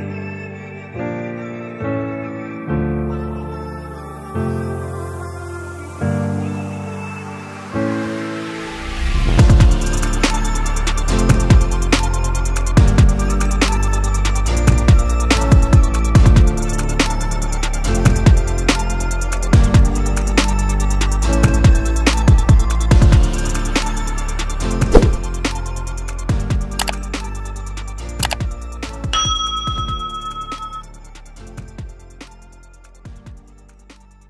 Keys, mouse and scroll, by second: 5.0-14.9 drag, 15.3 click, 17.5 click, 22.8 click, 31.3 click.